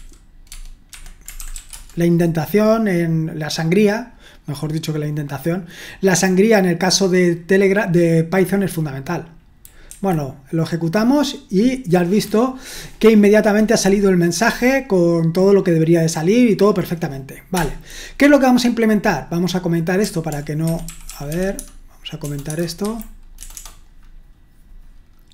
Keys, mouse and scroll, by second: 0.0-1.9 typing, 0.5 Tab, 0.9 Escape, 9.9 F5, 20.6 Escape, 20.7-23.5 typing, 22.6 Delete.